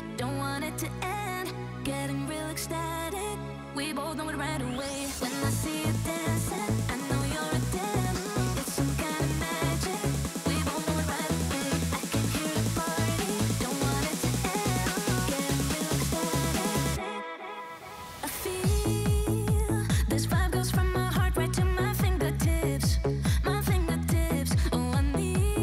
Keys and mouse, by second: 1.6 click, 1.9-3.3 drag, 4.4 g, 6.0-7.8 typing, 6.2 middle click, 8.9 KP_1, 9.3 g, 10.5 middle click, 11.1 g, 12.3 y, 12.5 middle click, 12.5 y, 12.8 s, 14.7 x, 14.7 x, 14.8 x, 15.7 click, 16.8 middle click, 17.1 KP_1, 17.5 shift+right click, 17.9 g, 19.1 KP_7, 21.2 click.